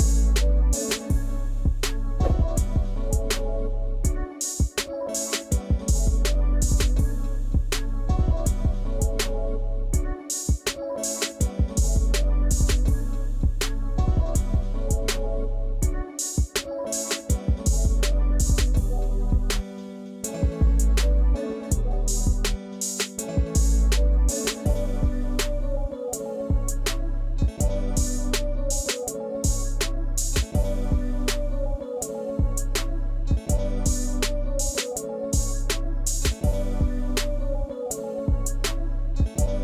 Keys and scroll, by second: 6.6 Delete.